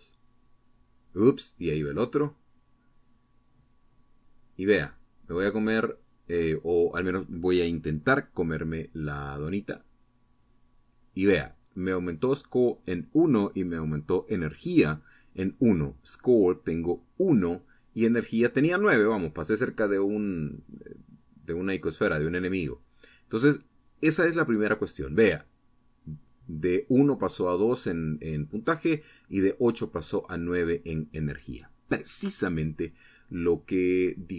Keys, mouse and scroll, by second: 1.0 Right, 1.2 Up, 3.8 Right, 8.8 Up, 9.4 Right, 9.9 Up, 15.2 Down, 16.0 Right, 16.9 Up, 17.5 Left, 18.4 Right, 19.7 Up, 24.2 Right, 24.6 Up.